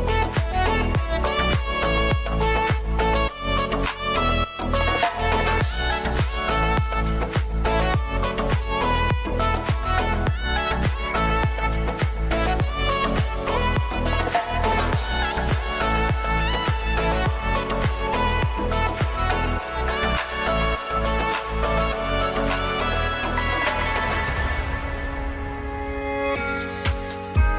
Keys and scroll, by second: 5.7 ctrl+space, 11.1 ctrl+space, 22.2 ctrl+c, 22.3 ctrl+v, 22.7 ctrl+t.